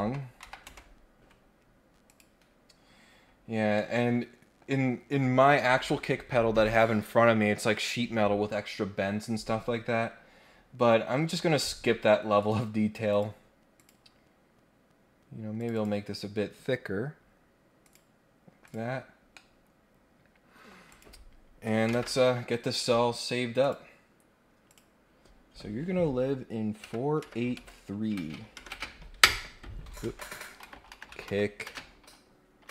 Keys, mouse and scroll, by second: 2.1 click, 3.1-3.6 scroll down 2, 3.7 middle click, 10.0-10.4 scroll down 1, 10.4-11.6 scroll up 3, 11.6 scroll down 1, 11.8-12.1 scroll up 2, 12.4 click, 13.1 click, 13.7 click, 15.6 click, 17.8 click, 18.6 click, 18.8-19.3 scroll down 1, 19.3-20.7 middle drag, 20.8 click, 23.6 click, 24.7 click.